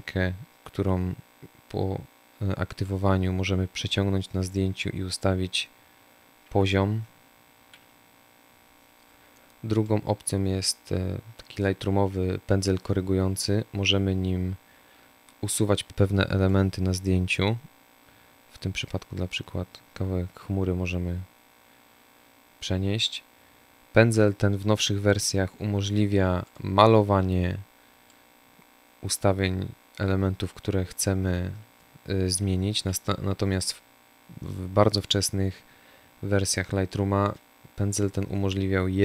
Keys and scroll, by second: 6.1 ctrl+z, 31.7 Delete.